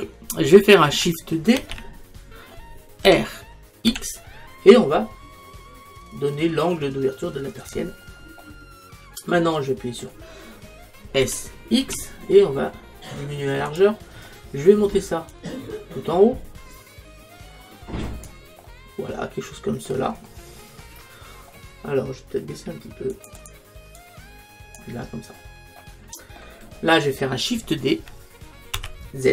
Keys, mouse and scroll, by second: 1.6 shift+d, 8.5-11.3 middle drag, 11.3 s, 13.8-17.2 drag, 18.7-20.5 middle drag, 23.2 click, 27.7-28.8 middle drag, 28.8 shift+d.